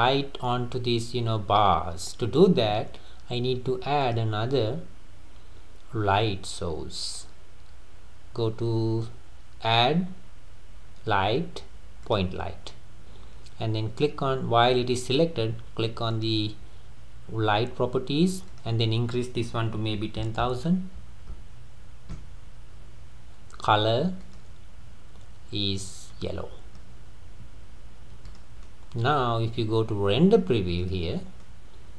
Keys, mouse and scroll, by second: 4.0-7.1 drag, 16.1 click, 18.5-20.4 drag, 20.4 KP_0, 21.3 KP_0, 24.2 click, 28.3 click, 28.7-31.1 middle drag, 31.1 click, 31.4-31.9 middle drag.